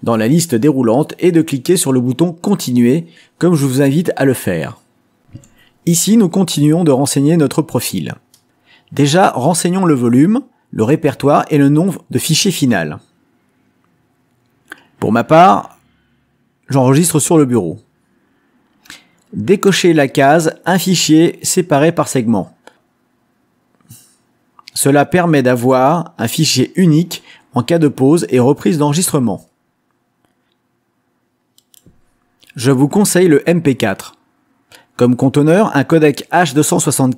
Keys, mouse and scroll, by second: 0.0 click, 1.7 click, 3.6 click, 6.2 click, 11.1 click, 13.8-15.0 drag, 19.2 middle click, 19.3 click, 20.2 click, 20.7 click, 21.2 click, 33.4 click, 35.4 click, 36.9 click.